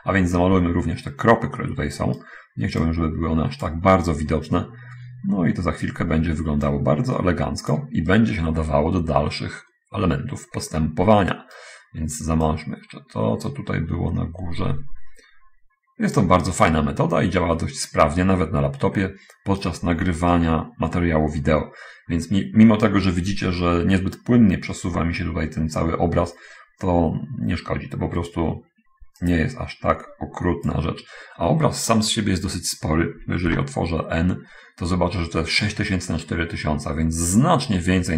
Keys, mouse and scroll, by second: 3.0-4.2 drag, 4.5-6.0 right drag, 7.1-8.3 drag, 8.5-11.9 right drag, 12.8-16.4 drag, 16.8-20.2 right drag, 20.8-28.4 right drag, 29.6-31.2 drag, 33.8 n.